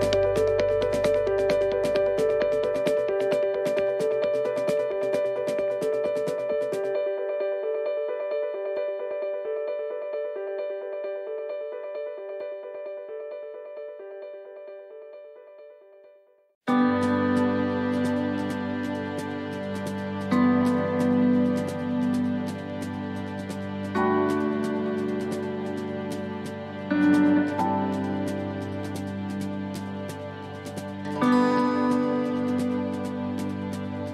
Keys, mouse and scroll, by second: 0.1 shift+middle click, 0.6-1.3 scroll up 3, 1.1 middle click, 3.0 scroll down 3, 3.3 shift+middle click, 4.1 middle click, 4.5-4.9 scroll down 1, 5.0 shift+middle click, 7.5 click, 16.0 BackSpace, 18.1 right click, 20.0 middle click, 20.3 scroll down 1, 20.9 middle click, 20.9-21.3 scroll down 2, 22.5 scroll down 2, 22.7 shift+middle click, 24.3 scroll down 1, 24.8 shift+middle click, 26.2-26.6 scroll up 4, 26.8 shift+middle click, 27.3 scroll up 2, 27.9 shift+middle click, 28.4 scroll up 1, 29.4 right click, 29.8 scroll down 2, 30.5 scroll down 1, 30.7 shift+middle click, 31.9 click.